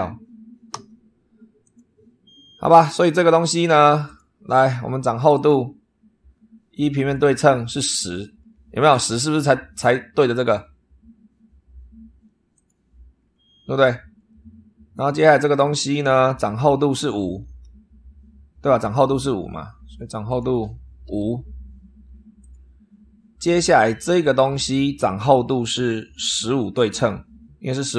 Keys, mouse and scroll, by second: 0.6 Delete, 1.5 click, 3.9 click, 5.2 click, 6.9 click, 8.0-8.5 scroll up 1, 12.4 click, 13.1-13.4 scroll down 1, 13.6 scroll up 1, 14.8 click, 19.1 super+3, 20.2 click, 20.9 5, 22.3 click, 24.0 click.